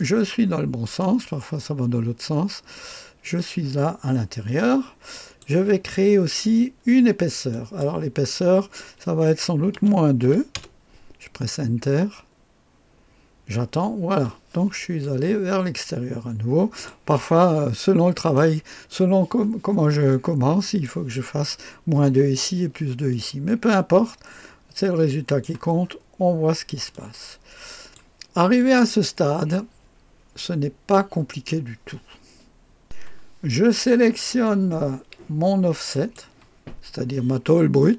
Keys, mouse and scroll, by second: 0.9-2.3 drag, 2.6 click, 3.5-5.9 drag, 7.4 click, 9.7 -, 10.2 KP_2, 10.5 Return, 15.0-16.9 drag, 17.1 click, 18.3-19.5 drag, 20.0-21.1 drag, 23.0-25.8 drag, 25.8-26.3 scroll up 3, 26.3-26.8 scroll down 1, 26.8-29.1 drag, 32.8 click, 35.8 click.